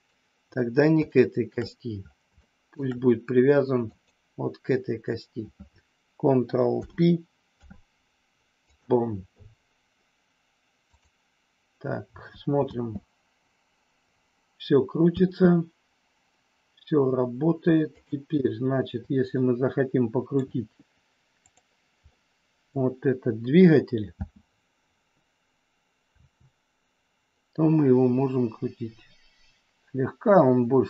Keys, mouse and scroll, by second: 1.1 shift+middle click, 2.3 shift+middle click, 3.9 click, 6.7 ctrl+p, 10.8-12.1 drag, 12.7 space, 15.2 space, 17.8 click, 19.3-20.3 middle drag, 22.1 middle click, 24.1 space, 26.1 r.